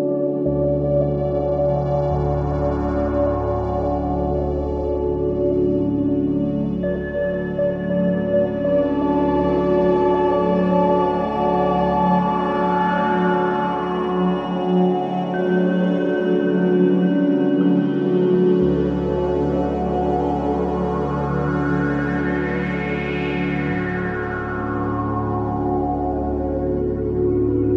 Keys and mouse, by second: 1.5-3.0 ctrl+alt+drag, 1.5 typing, 2.6-3.8 typing, 3.8 click, 8.4 click, 9.7 alt+shift+click, 10.5-16.2 ctrl+alt+drag, 17.1-19.7 drag, 20.8 Delete, 21.2 click, 22.8 click, 24.2 typing, 25.7 click, 26.9-27.7 drag.